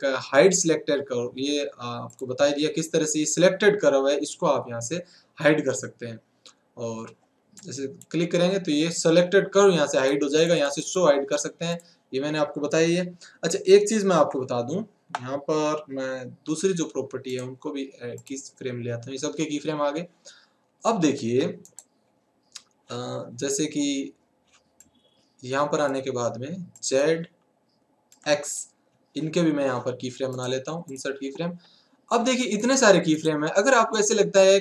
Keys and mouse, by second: 0.0 click, 2.1-3.8 drag, 10.0-13.6 drag, 14.2 alt+a, 16.5 n, 18.2-20.9 right drag, 24.5 right click, 24.8-31.0 drag, 31.0-34.6 right drag.